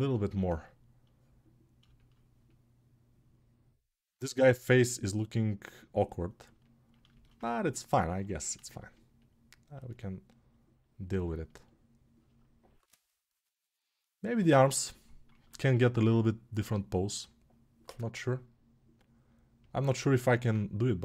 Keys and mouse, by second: 6.8-10.1 alt+shift+right drag, 10.1-21.0 alt+drag.